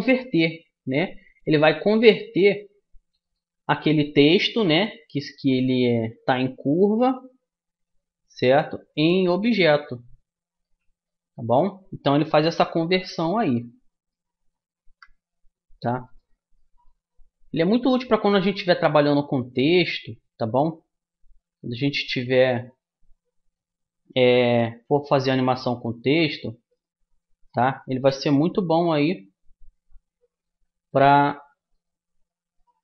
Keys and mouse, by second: 8.4 Tab, 9.6-12.5 middle drag, 13.9 e, 16.6-21.4 middle drag, 21.4 alt+c, 23.1-24.8 drag, 25.9 Tab, 26.7-29.2 drag, 30.8 alt+c, 32.6-32.8 drag.